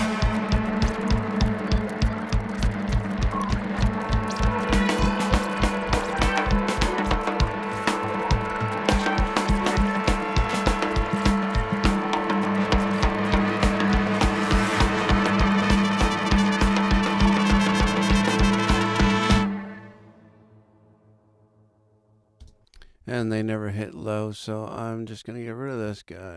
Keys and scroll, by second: 22.4 space.